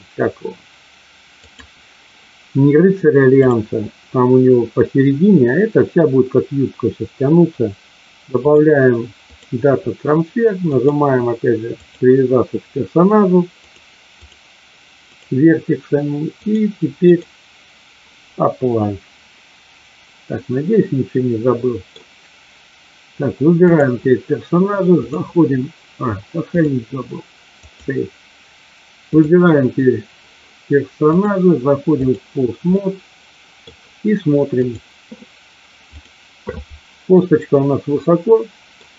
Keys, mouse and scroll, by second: 1.4 click, 3.2 click, 8.5-9.5 drag, 10.7 click, 13.5 click, 15.0 click, 16.4-17.2 drag, 20.4-21.9 middle drag, 24.9 click, 26.6-27.9 drag, 29.1-30.2 drag, 31.0-32.1 drag, 32.7 middle click, 34.7-35.5 drag, 35.9 click, 37.1-38.7 middle drag.